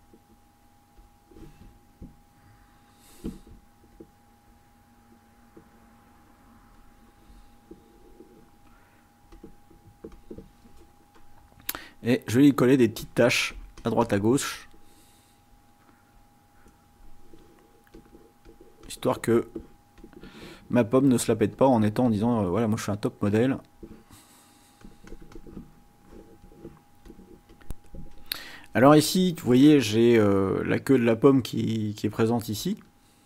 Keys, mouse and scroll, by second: 0.0-1.2 drag, 3.9-7.8 drag, 9.3 click, 9.9 click, 12.8-14.2 drag, 15.2-15.9 scroll down 4, 18.0 click, 18.6 click, 19.2 click, 20.0 click, 20.9 click, 21.5 click, 23.6 click, 24.6 click, 26.0 click, 27.1 click, 31.6 click, 32.3 click, 32.9 click.